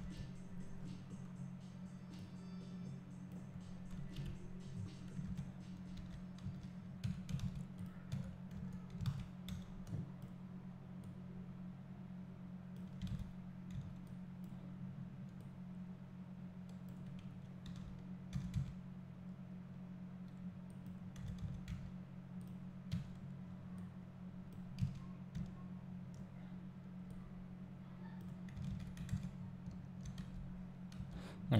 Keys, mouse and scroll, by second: 0.0 KP_7, 0.8 scroll down 1, 2.2-4.1 drag, 4.1 KP_Decimal, 4.7-6.0 scroll down 2, 7.0 Tab, 8.1 Tab, 9.0 alt+a, 10.3 b, 11.0 click, 13.1 alt+a, 14.4-21.2 drag, 14.4 b, 17.7 a, 18.3 s, 21.2 s, 22.4 click, 22.9 Tab, 24.5-31.5 drag, 25.3 `, 28.7 alt+a, 29.3-29.7 scroll up 1, 30.2 Tab.